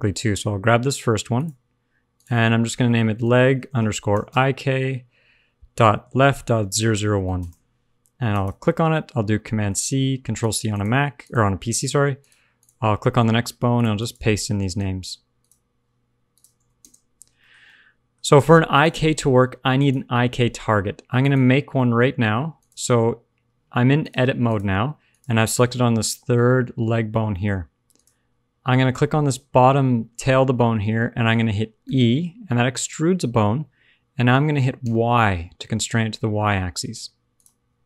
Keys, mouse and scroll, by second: 1.3 click, 2.1 click, 6.7 0, 8.2 click, 10.6 click, 11.2 click, 11.7 click, 12.1 click, 12.5 click, 13.0 shift+middle click, 13.7 click, 13.9 click, 15.3 click, 16.2 click, 17.3 shift+middle click, 17.6 middle click, 18.7 click, 19.1 Tab, 19.5 Tab, 19.7 click, 20.6 Tab, 21.2 click, 21.5-21.9 scroll down 2, 21.7 middle click, 21.9-22.5 scroll up 1, 22.5 click, 22.5 scroll up 1, 23.9 click, 25.0 click, 27.4 shift+middle click, 27.9 click, 31.8 e.